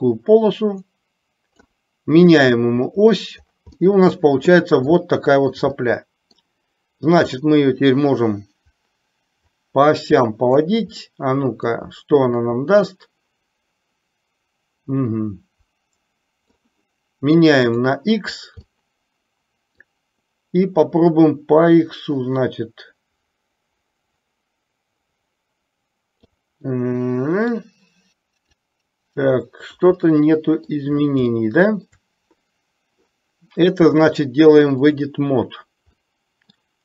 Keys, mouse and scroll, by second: 2.5 click, 3.8-4.6 middle drag, 5.0-5.6 shift+middle drag, 5.8-6.5 middle drag, 7.3-10.6 drag, 11.1 scroll up 1, 11.2-11.7 middle drag, 13.0-16.6 drag, 18.8-20.0 middle drag, 21.2 click, 21.5-26.3 drag, 26.8-27.6 middle drag, 28.6-29.8 drag, 30.1-30.7 middle drag, 31.5-31.8 shift+middle drag, 34.2-35.1 drag, 36.1 middle click.